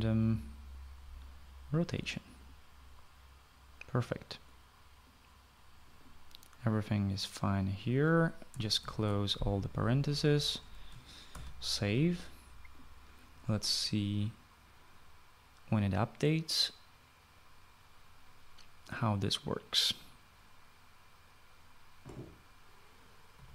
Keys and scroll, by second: 0.0-1.2 typing, 9.6 ), 12.1 ctrl+s.